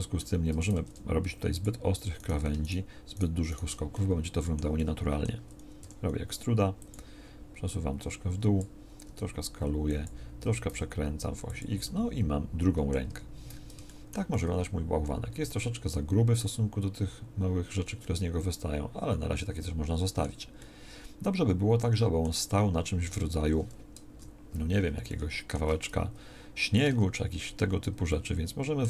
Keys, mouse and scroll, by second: 5.8 e, 9.0 s, 10.4 r, 13.0 Tab, 24.0 KP_1, 26.8 Tab, 27.6 a.